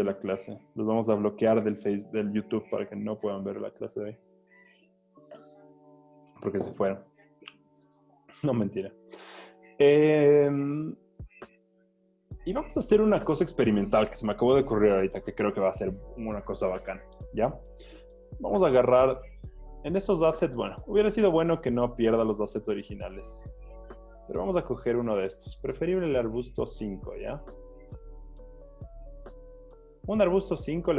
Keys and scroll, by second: 12.6 z, 22.3 v, 23.7 super+z, 30.2 super+z.